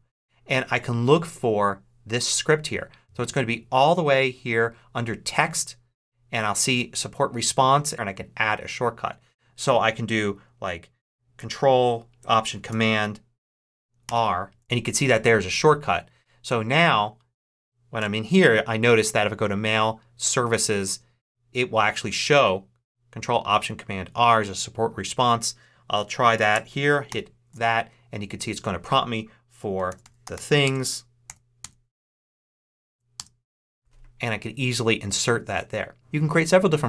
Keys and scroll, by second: 14.0 ctrl+alt+super+r, 17.9 BackSpace, 27.0 ctrl+alt+super+r, 29.6-31.2 typing, 31.5 Return, 32.8 Down, 33.1 Return.